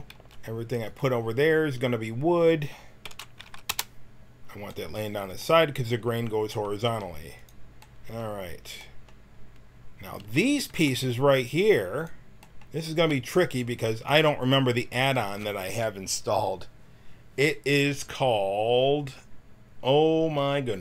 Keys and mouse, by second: 0.1 c, 3.0 r, 6.9 g, 10.2 a, 10.7 b, 13.1 c.